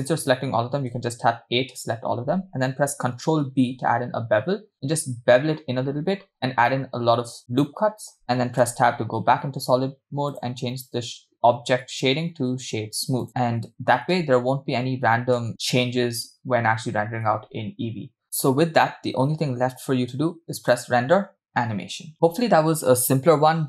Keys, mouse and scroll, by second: 1.0 a, 3.6 ctrl+b, 8.7 Tab, 10.3-13.3 drag, 14.6 space, 15.7 space, 17.7 space, 18.5 space, 20.7-22.1 drag.